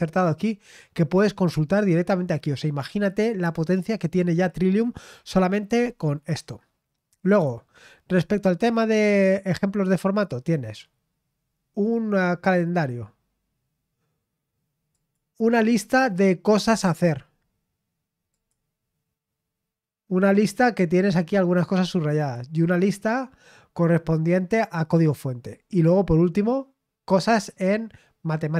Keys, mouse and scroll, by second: 1.4-3.1 scroll down 3, 3.1-3.5 scroll down 1, 7.2 click, 8.1-8.6 scroll down 1, 10.2 click, 14.9 click, 18.3 click, 22.1 click, 25.5 click.